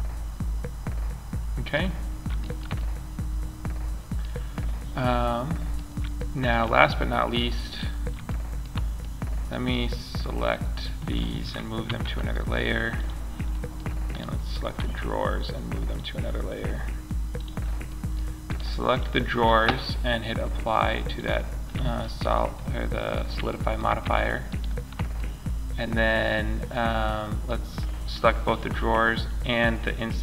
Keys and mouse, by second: 9.8-10.5 right drag, 11.2 m, 12.9-14.5 right drag, 14.1 m, 20.5 click, 21.3-21.9 drag, 22.1 click.